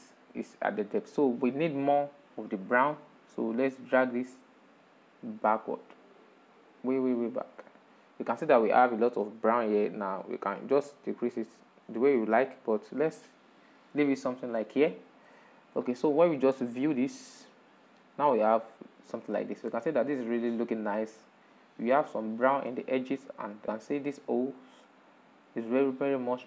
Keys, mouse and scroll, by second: 0.0-2.2 shift+middle drag, 2.2-2.5 scroll up 5, 3.2-8.7 drag, 9.5-12.6 drag, 13.6-15.1 middle drag, 15.1 scroll down 4, 15.3-16.5 shift+middle drag, 16.5 ctrl+shift+click, 18.1-19.1 middle drag, 19.1-19.8 scroll up 3, 21.7-26.4 middle drag.